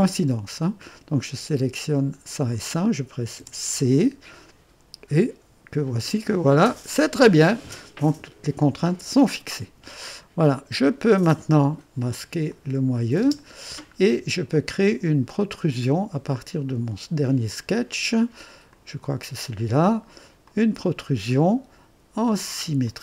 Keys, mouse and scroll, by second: 2.3 click, 3.4 c, 8.9 click, 10.1-11.0 drag, 12.5 click, 13.2 space, 13.9 scroll up 1, 14.6-15.9 drag, 18.7 click, 20.4 click, 22.8 click.